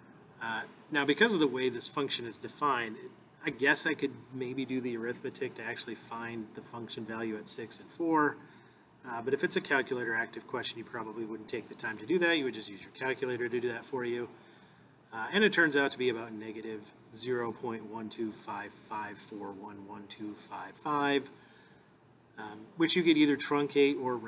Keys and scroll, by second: 13.6 Return.